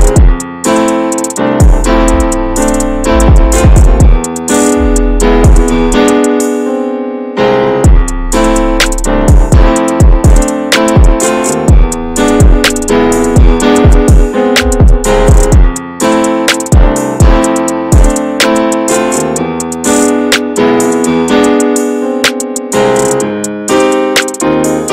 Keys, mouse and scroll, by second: 0.3 click, 2.4-3.5 shift+middle drag, 3.5 click, 3.9 middle click, 4.4-5.7 drag, 5.7-7.4 alt+middle drag, 7.4 ctrl+s, 7.6 middle click, 7.8-8.3 scroll up 1, 8.3-9.3 drag, 9.3 ctrl+z, 9.7 shift+middle click, 10.3 click, 10.6 middle click, 11.1 shift+d, 12.0 alt+middle click, 12.9 r, 14.2 e, 15.6 middle click, 15.8 scroll up 2, 16.0 shift+middle click, 16.9 click, 17.4 middle click, 18.1 shift+click, 18.5 middle click, 18.9 s, 20.7 middle click, 21.7 click, 22.2 l, 22.6 middle click, 23.1 s.